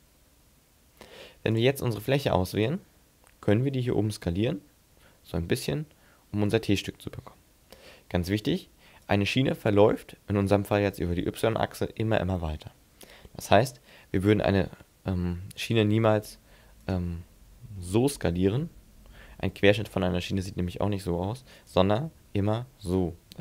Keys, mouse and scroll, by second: 1.5 click, 2.5 right click, 4.8 s, 9.1 right click, 14.0 s, 16.9 right click, 17.8 s, 21.7 right click, 22.1 s.